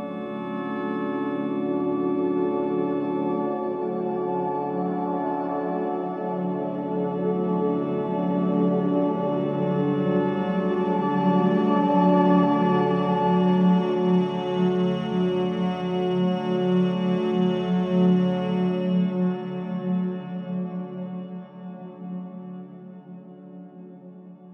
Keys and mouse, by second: 1.7 click, 4.1 click, 5.3 click, 6.5 click, 7.9 click, 8.4 click, 11.2 click, 12.5 click, 13.7 click, 15.1 click, 16.6 click, 17.7 click, 19.6 click, 21.0 click, 22.3 click, 23.5-24.5 drag.